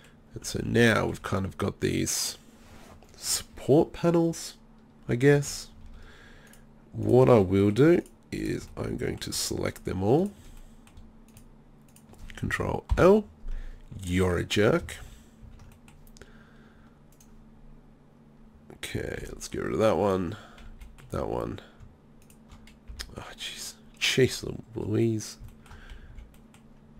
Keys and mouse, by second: 0.4 z, 0.6 z, 0.8 z, 1.1 z, 2.2 middle click, 5.1 middle click, 5.1 click, 5.2-6.5 middle drag, 7.5 click, 8.8-12.9 middle drag, 12.9 ctrl+l, 15.0 ctrl+z, 15.5 ctrl+z, 17.6-18.9 middle drag, 19.2 b, 20.7 b, 22.9 b, 25.5 middle click.